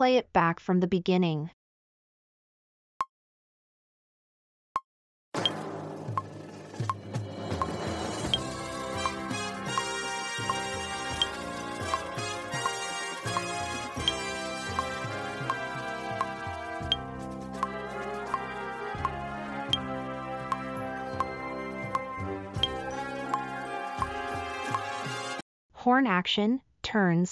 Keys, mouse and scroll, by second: 8.2 typing.